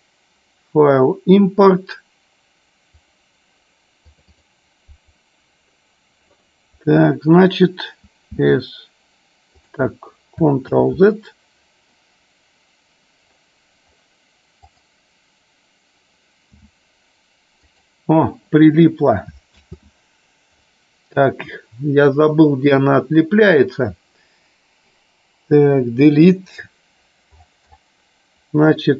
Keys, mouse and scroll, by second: 10.9 ctrl+z, 14.7 click, 19.8 ctrl+z, 25.8 Delete.